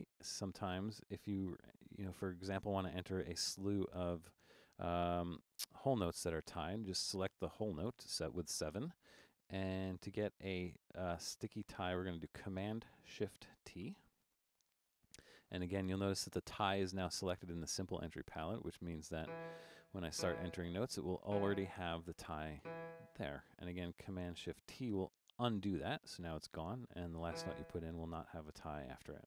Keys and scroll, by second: 0.0 Down, 1.7 7, 13.8 shift+super+t, 19.3-20.1 typing, 21.3 typing, 22.6 typing, 25.0 shift+super+t, 27.3 e.